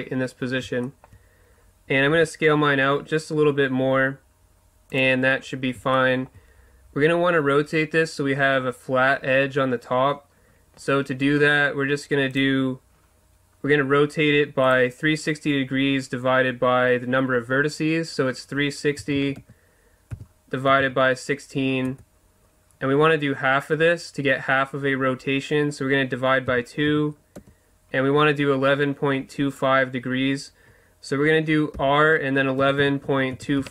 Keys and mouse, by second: 0.8 click, 0.9-2.2 middle drag, 2.2 s, 2.5-3.6 drag, 5.0-6.2 drag, 6.2-9.4 middle drag, 31.7 r.